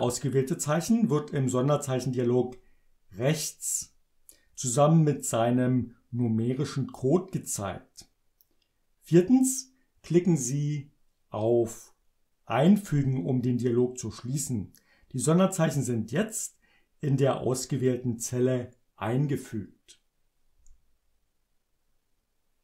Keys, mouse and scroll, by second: 17.8 click, 20.6 Return.